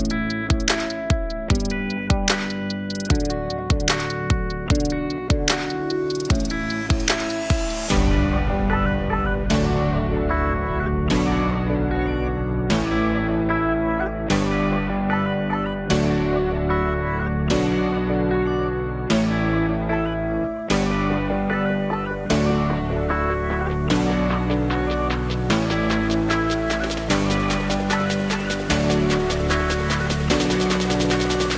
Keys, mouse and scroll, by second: 1.7 click, 10.0 click, 10.6 click, 13.3 click, 14.9-16.1 drag, 17.1 click, 18.7-22.4 drag, 22.4-28.4 middle drag, 28.4-30.8 drag.